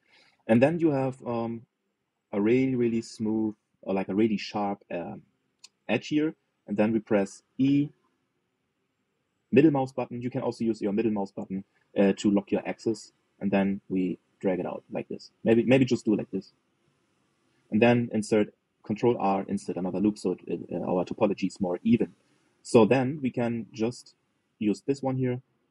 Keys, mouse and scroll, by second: 8.2 e, 19.8 ctrl+r, 21.2 click, 23.8 click.